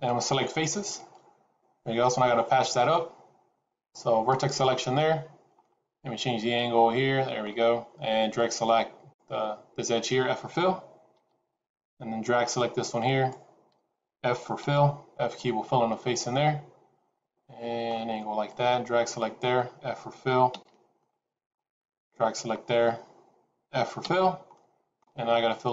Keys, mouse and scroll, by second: 2.7 scroll down 2, 4.3 click, 5.5 middle click, 8.2 click, 11.1 f, 12.3 click, 14.5 f, 15.3 middle click, 18.4 click, 20.4 f, 20.9 middle click, 21.9 click, 24.0 f, 24.4 middle click.